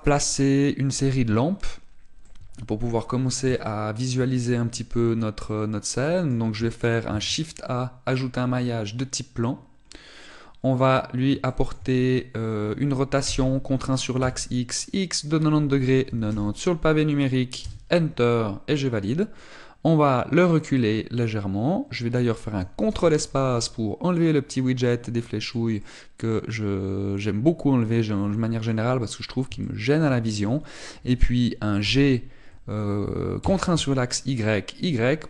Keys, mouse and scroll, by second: 0.3 ctrl+s, 2.9 middle click, 3.9-4.3 scroll down 2, 4.3 shift+middle click, 5.1 middle click, 7.8 shift+a, 10.6 middle click, 12.2 shift+middle click, 12.6-13.8 scroll up 3, 14.0 r, 20.1 click, 23.7 ctrl+space, 25.3 middle click, 26.5 middle click, 30.3 shift+middle click, 32.5 g.